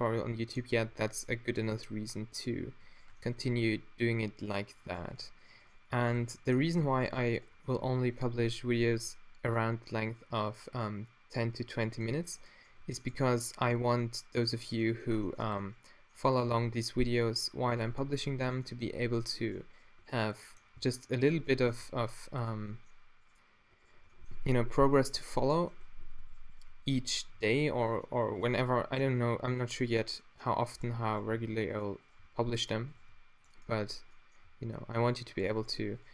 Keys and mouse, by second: 0.9 g, 3.6 e, 6.2 f, 6.8 a, 8.5 g, 13.2 r, 15.4 Tab, 16.7 t, 19.0 Tab, 20.8 s, 21.8 g, 27.0 f, 27.4 a, 27.6 ctrl+r, 31.3 g, 32.2 g, 33.0 g, 34.5 a.